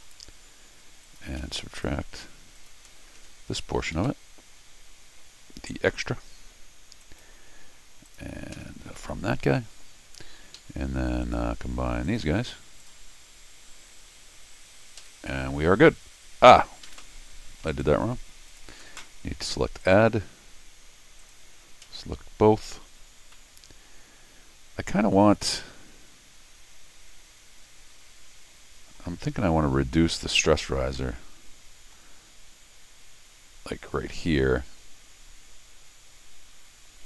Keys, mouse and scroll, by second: 0.5 middle click, 1.0 click, 1.4 c, 1.7 click, 2.6 click, 3.2 scroll down 2, 3.9 alt+x, 4.8 middle click, 5.1 middle click, 7.0 click, 8.1 click, 10.6 Escape, 11.2 click, 12.0 click, 12.8 click, 16.8 Escape, 17.7 right click, 18.5 click, 19.8 click, 21.2 click, 22.9-23.3 scroll up 4, 23.3-28.9 middle drag, 30.9-31.9 middle drag.